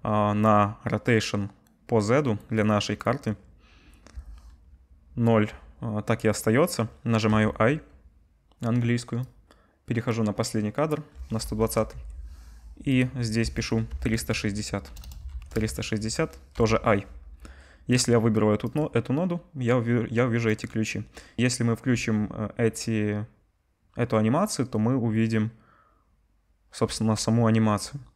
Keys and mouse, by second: 11.9 Right, 15.0 BackSpace, 16.5 i, 18.8-20.5 drag, 21.9 space, 26.8 space.